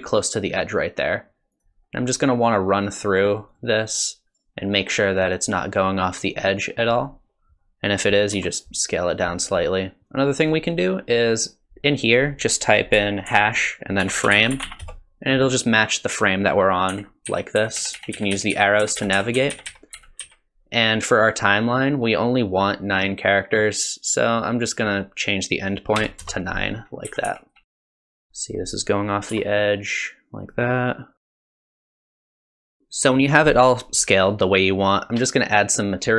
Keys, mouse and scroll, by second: 3.3 click, 3.5 click, 5.0 click, 8.3 s, 10.0 click, 10.4 click, 11.3 click, 16.9 Right, 17.3 Left, 17.6 Right, 17.8 Right, 17.9 Right, 18.1 Left, 18.3 Left, 18.5 Left, 18.8 Right, 19.0 Right, 19.1 Right, 19.4 Left, 19.5 Left, 19.7 Left, 19.9 Right, 20.2 Left, 24.6 click, 27.1-28.0 Right, 27.6 Left, 27.8 Right, 27.8 Left, 28.2 Left, 29.3 s, 31.2 Left, 31.6 Right, 31.7 Right, 31.8 Left, 31.9 Left, 32.1 click, 32.5 click, 32.7 Left, 32.9 s.